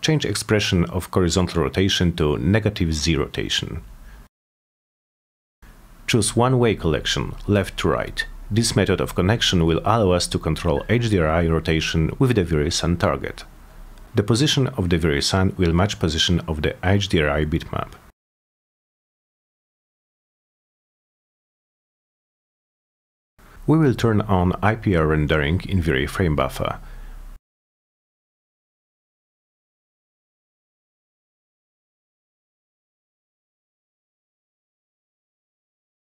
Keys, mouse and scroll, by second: 0.6 click, 2.7 click, 4.1 -, 15.1 click, 17.3 click, 19.9 click, 20.7 middle drag, 21.8 c, 22.4 click, 23.6 F4, 25.4 click, 27.4 click, 28.4 click, 30.1 click, 33.5 click, 34.7 click, 35.7 click.